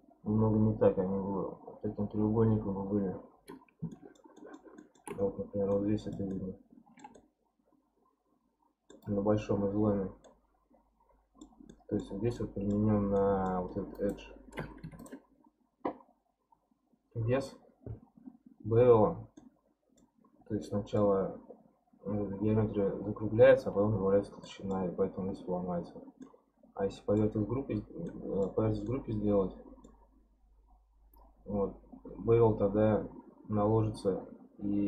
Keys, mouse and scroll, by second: 2.9-3.9 scroll down 4, 3.9-5.2 shift+middle drag, 5.2-5.7 scroll up 3, 5.7 middle click, 6.2 scroll up 1, 6.3-10.1 shift+middle drag, 10.2-13.9 middle drag, 13.9 click, 14.8 2, 15.0 click, 19.4-23.7 middle drag, 24.4-26.0 middle drag, 26.0 scroll down 1, 26.2-30.1 middle drag, 30.1-33.1 scroll up 1.